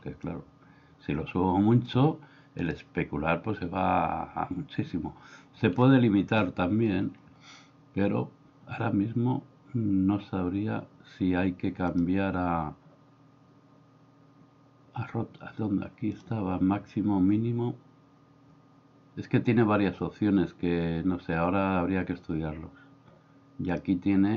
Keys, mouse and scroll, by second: 0.3-2.0 drag, 11.9-15.5 drag, 16.2-19.8 drag, 23.8-24.3 drag.